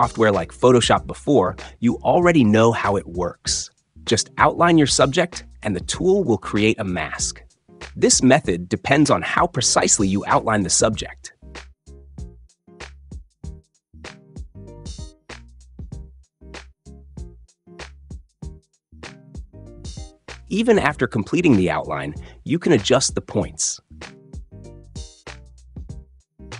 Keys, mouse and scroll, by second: 1.1 click, 2.9-3.9 drag, 4.4-5.4 drag, 6.5 click, 7.2 click, 7.6 click, 8.2 click, 9.2 click, 9.8 click, 10.6 click, 11.4 click, 12.4 click, 13.5 click, 14.5 click, 15.0 click, 17.6 click, 22.5 click.